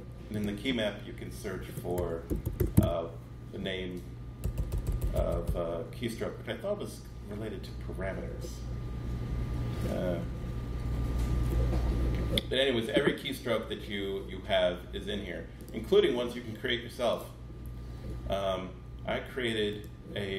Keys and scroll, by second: 1.3-4.7 typing.